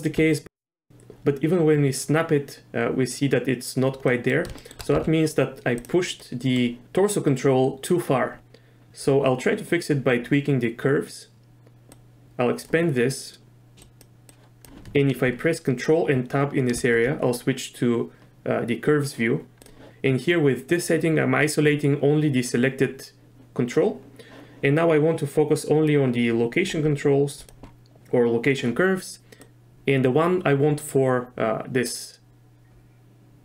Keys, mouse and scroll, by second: 0.3 shift+middle click, 4.1 middle click, 4.6 shift+click, 4.9 z, 6.2 click, 12.0 click, 13.8 click, 14.3 click, 14.4 scroll up 1, 16.7 ctrl+Tab, 19.6 click, 25.9-26.6 drag, 27.4 click, 29.5-33.4 drag.